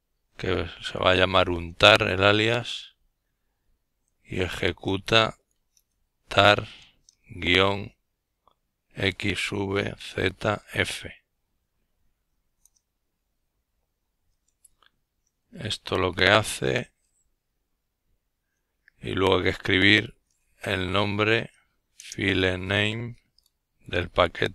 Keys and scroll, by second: 0.0-1.2 typing, 2.9-4.6 typing, 6.6 typing, 10.6 typing, 14.0-17.9 typing, 19.4-20.4 typing, 21.6-24.2 typing.